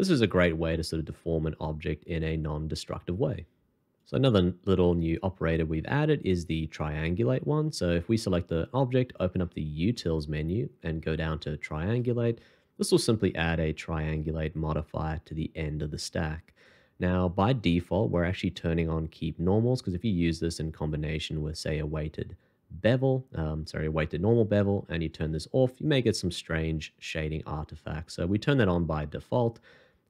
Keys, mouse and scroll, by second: 9.1 alt+t, 25.9 middle click.